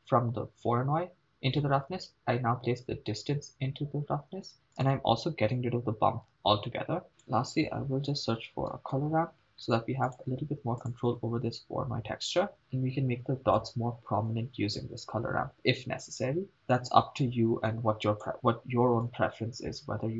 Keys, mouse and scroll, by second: 4.8 click, 6.2 x, 7.1 shift+space, 7.1 shift+a, 12.6 click, 14.8-18.3 drag, 18.0 middle click, 19.1 click.